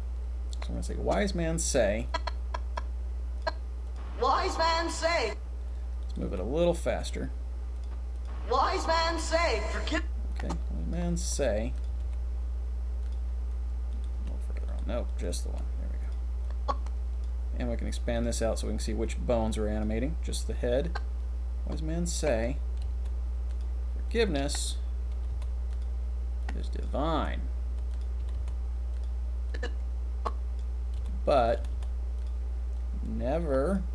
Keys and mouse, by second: 0.5-0.8 drag, 1.6 middle click, 2.8-3.9 middle drag, 4.0 middle click, 4.6 click, 6.0 click, 6.2 g, 6.2 click, 6.6 click, 6.8 click, 7.7 click, 8.2 click, 9.0 click, 9.8 click, 10.3 drag, 11.2 r, 11.9 r, 12.1 r, 14.1 g, 15.1 click, 15.4 g, 16.0-16.4 drag, 16.4-17.0 middle drag, 17.0 click, 18.1 click, 19.0 click, 19.8-20.8 middle drag, 20.8-22.4 drag, 22.8 r, 23.0 r, 24.1-24.5 drag, 25.2 r, 25.4 r, 26.4-26.8 drag, 27.2 r, 28.3 r, 28.5 r, 29.5-30.6 drag, 30.9 r, 31.6 r, 31.7 r, 32.7-33.7 drag.